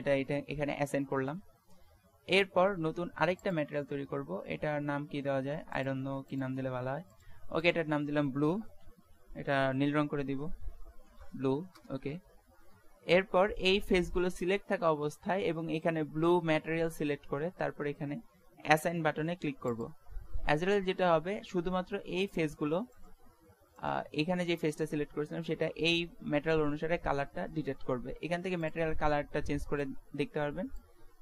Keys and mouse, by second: 3.1 middle click, 3.5-5.2 drag, 5.7-9.5 drag, 23.0-26.4 right drag, 26.4-28.7 middle drag, 28.7-30.5 drag.